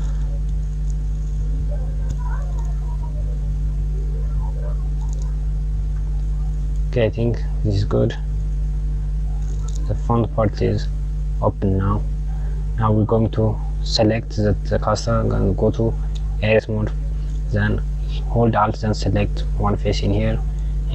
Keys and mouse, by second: 5.4 Tab, 6.2 drag, 7.5 click, 8.3 click, 13.0 click, 14.7 Tab, 16.4 KP_Subtract, 18.9 alt+click.